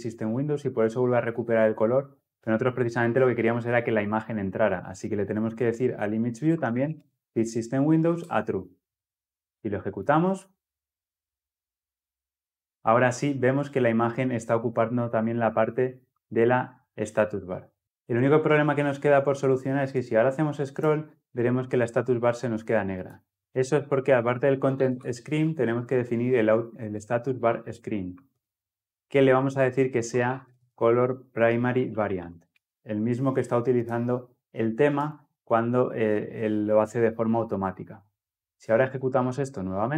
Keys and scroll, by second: 7.2 Return, 9.7 ctrl+F10, 17.8 ctrl+F10, 26.7 Return, 38.7 ctrl+F10.